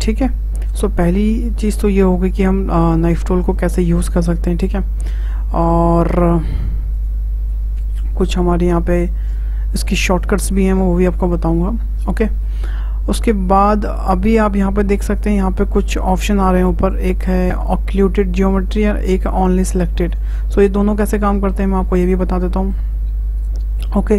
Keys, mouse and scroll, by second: 1.4 `, 3.5-4.6 shift+middle drag, 4.6 k, 9.2-12.2 drag, 12.2-15.2 shift+middle drag, 21.3 shift+middle click, 21.7-22.1 scroll down 2, 22.6-24.1 shift+middle drag.